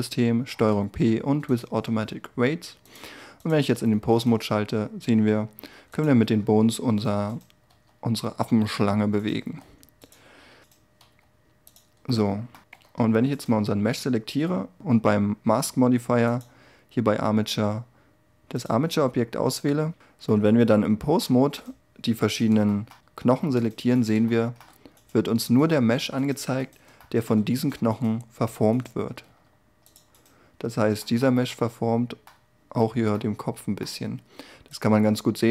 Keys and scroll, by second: 4.0 r, 6.2 g, 7.7 r, 12.7 z, 28.7 r.